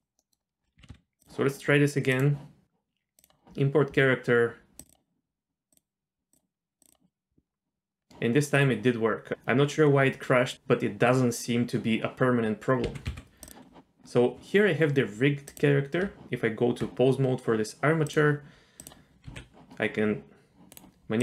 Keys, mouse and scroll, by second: 0.2-0.6 middle drag, 0.6 scroll down 1, 0.8 g, 2.1-3.0 drag, 3.2 click, 8.0-9.3 scroll down 1, 9.3 click, 12.8 g, 15.4 click, 16.1 Tab, 18.8 click, 19.3 r, 21.0 r.